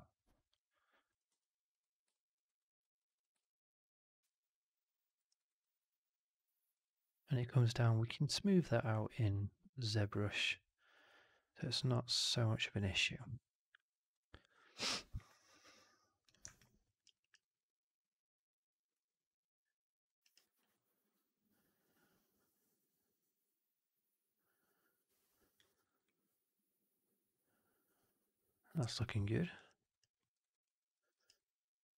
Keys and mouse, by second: 1.0 click, 2.0 alt+drag, 2.4 alt+drag, 2.7 alt+drag, 3.3-5.0 alt+drag, 5.1 alt+right drag, 5.3 alt+right drag, 5.5-6.6 alt+drag, 16.5-16.9 alt+drag, 16.9 alt+right drag, 17.1 alt+right drag, 17.3-20.0 alt+drag, 20.1 alt+right drag, 20.3 alt+right drag, 20.6-25.5 alt+drag, 25.6 alt+right drag, 25.8 alt+right drag, 25.9-29.5 alt+drag, 29.6 alt+right drag, 29.8 alt+right click, 30.1 alt+middle drag, 30.3 alt+right drag, 30.6 alt+click, 30.8 alt+middle drag, 31.0 alt+right drag, 31.3-31.9 alt+drag.